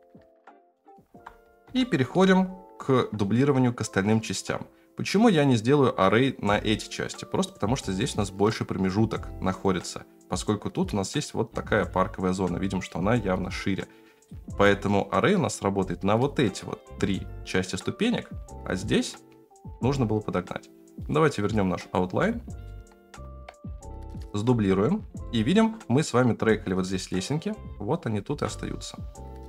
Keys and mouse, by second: 1.0 alt+z, 1.8-2.1 shift+middle drag, 14.2-22.1 drag, 22.2-22.6 middle drag, 23.4 KP_3, 24.0 KP_1, 25.2 shift+middle drag, 28.3 shift+d.